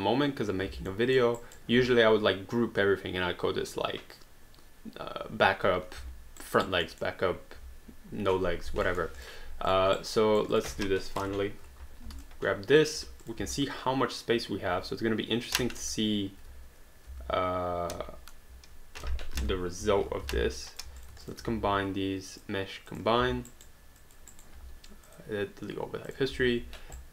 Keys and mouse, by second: 0.9 alt+middle click, 1.4 alt+right click, 6.5 alt+right click, 6.9 alt+middle click, 8.9 alt+middle click, 9.2 click, 10.0 right click, 10.5 click, 11.2 Delete, 12.2 alt+click, 13.2 click, 13.7 alt+click, 15.5 click, 15.8 1, 17.1 ctrl+z, 19.4 ctrl+y, 19.8 3, 20.4 alt+d, 20.7 alt+click, 21.3 shift+click, 22.3 click, 23.5 alt+right click, 24.0 alt+click, 24.3 alt+right click, 25.1 click, 27.0 right click.